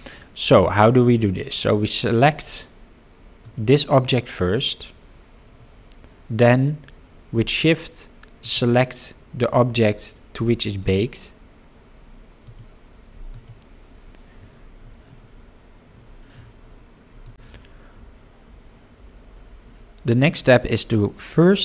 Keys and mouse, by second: 3.4 click, 8.4 shift+click, 10.8 ctrl+click, 13.3 ctrl+click.